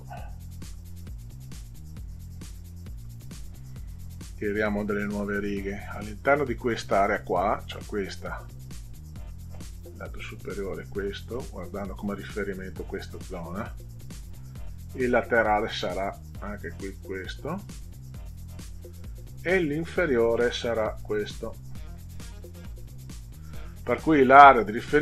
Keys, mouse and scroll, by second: 0.7 Delete, 3.0 Delete, 4.5-7.1 drag, 8.5-11.8 drag, 14.1-18.4 drag, 19.7-23.1 drag.